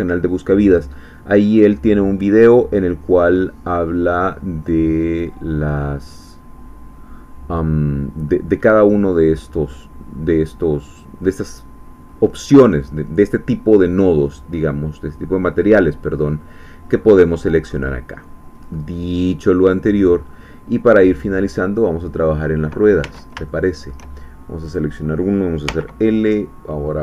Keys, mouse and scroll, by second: 2.8 scroll up 2, 3.4 scroll up 2, 4.3-6.2 scroll up 2, 8.2-9.1 scroll up 2, 9.9-10.4 scroll down 2, 10.6-11.0 scroll down 2, 11.0 middle click, 12.0-12.4 scroll down 1, 12.6-13.1 scroll up 1, 13.1 middle click, 13.3 scroll up 1, 13.6 middle click, 14.5 scroll up 1, 14.8 middle click, 15.7-17.0 scroll up 3, 17.0-17.5 scroll up 1, 17.5 middle click, 17.8-18.6 scroll up 1, 18.6 middle click, 19.2-20.0 scroll up 2, 19.4 middle click, 20.0 middle click, 20.2-20.5 scroll up 1, 20.5 middle click, 21.2 click, 21.4 middle click, 23.0 Tab, 23.5-24.5 shift+drag, 24.7 click, 25.7 l.